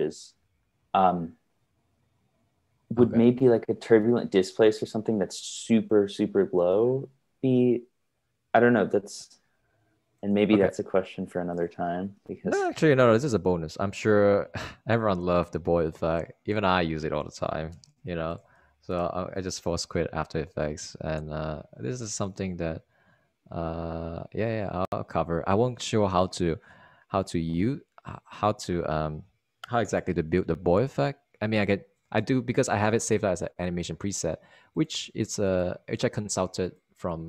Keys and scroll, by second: 4.0 super+Tab, 18.9-20.1 typing, 20.1 Return.